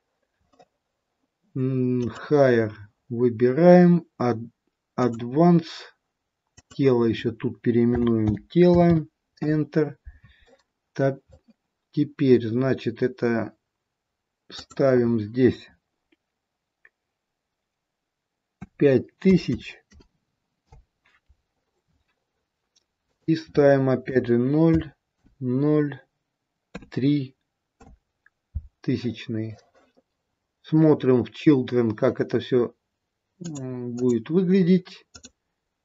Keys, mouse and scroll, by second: 2.4 click, 5.4 click, 14.5 click, 19.4 KP_0, 23.1 click, 30.3-30.8 scroll down 2, 33.9 click.